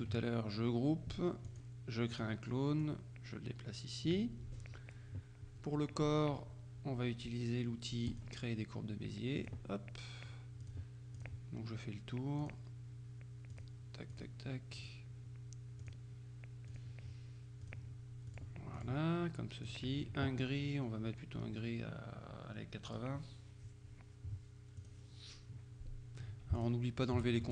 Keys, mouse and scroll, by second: 1.6 click, 2.2 click, 2.9-4.6 drag, 8.1 click, 9.5 click, 10.7 click, 12.5 click, 13.6 click, 14.2 click, 14.9 click, 15.9 click, 16.8 click, 17.7 click, 18.4-19.4 drag, 19.7 click, 22.9 click, 24.9 click, 26.6-27.5 shift+drag.